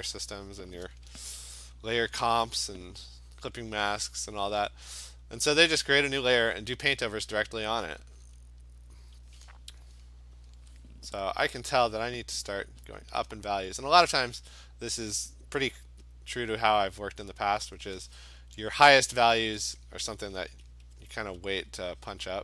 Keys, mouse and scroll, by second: 0.6 click, 1.2 ], 1.4 ], 1.6 ], 2.1 ], 3.1 click, 3.5 click, 3.9 [, 4.1 [, 4.3 [, 4.9 [, 5.9 click, 6.7 click, 7.9 click, 8.4 click, 9.0 click, 12.1 click, 13.0 click, 13.4 click, 16.3 click, 17.6 click, 19.4 Return, 22.3 click.